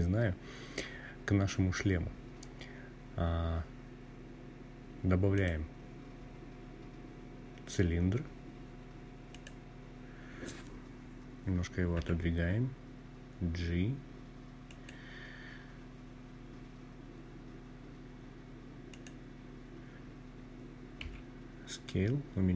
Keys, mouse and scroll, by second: 4.1-8.3 drag, 10.7 g, 13.4 click, 17.6 click, 19.7 s.